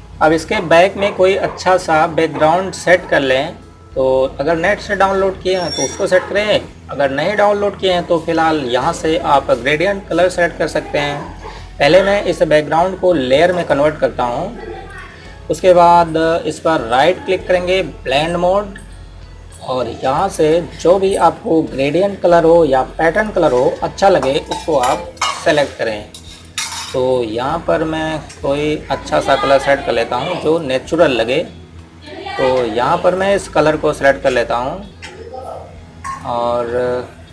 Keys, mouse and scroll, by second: 0.0 click, 14.1 click, 17.7 right click, 19.0 click, 24.0 click, 37.0 click.